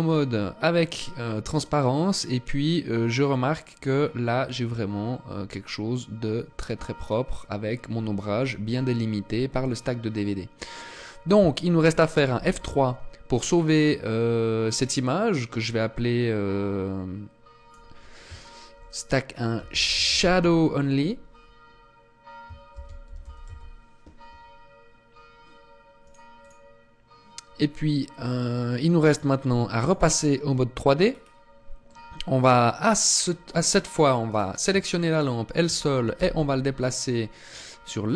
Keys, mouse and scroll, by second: 29.2 click, 30.4-31.2 scroll down 2, 31.2 middle click, 32.5 scroll down 1, 33.6 right click, 34.4 shift+right click, 35.5 m.